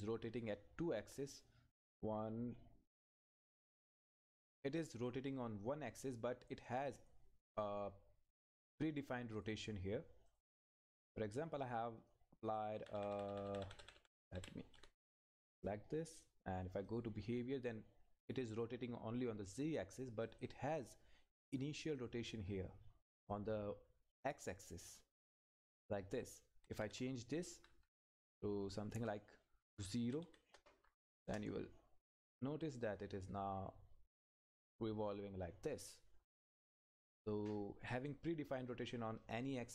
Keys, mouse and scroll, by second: 6.7 click, 9.3 click, 12.8 Up, 16.1 click, 20.2 click, 23.6 Left, 26.2 click, 26.5 Right, 30.0 Right, 31.2 Return.